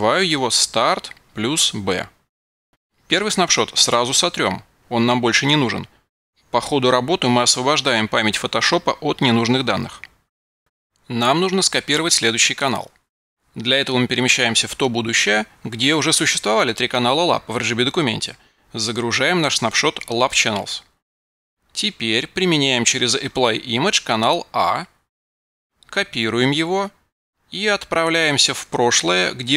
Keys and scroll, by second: 0.1 super+v, 26.4 super+a, 26.8 super+c.